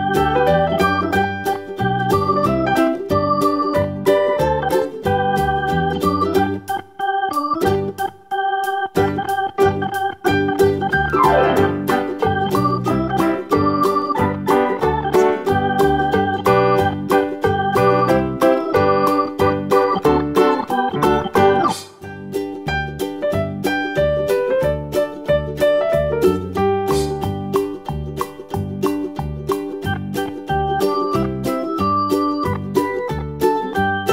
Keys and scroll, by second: 9.6 Tab, 23.6 super+d, 31.4 Left.